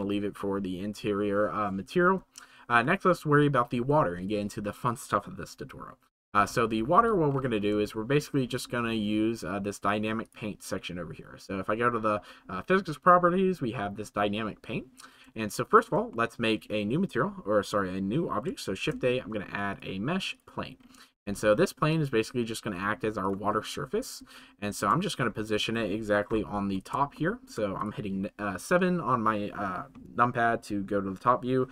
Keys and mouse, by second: 2.9-3.4 shift+middle drag, 8.0-8.4 shift+middle drag, 15.5-15.8 shift+middle drag, 16.2 middle click, 23.2 click, 24.3-24.8 shift+middle drag, 27.2 shift+middle drag, 28.5 click.